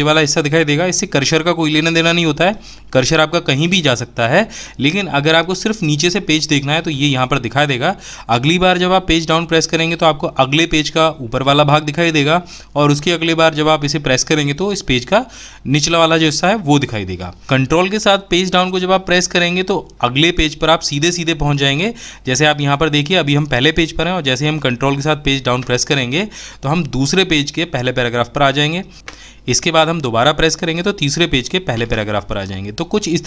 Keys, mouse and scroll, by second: 9.4 Page_Down, 22.8 ctrl+Page_Down, 29.5 ctrl+Page_Down.